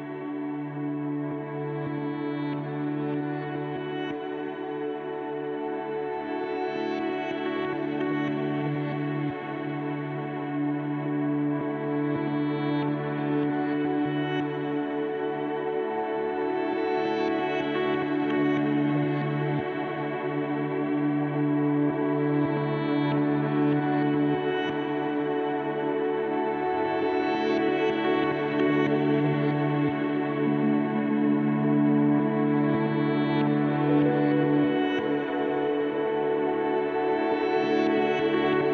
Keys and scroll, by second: 3.6 1, 4.0 1, 9.2 1, 11.0-11.8 typing, 17.1 1, 30.6 1, 33.8 1, 37.1 1.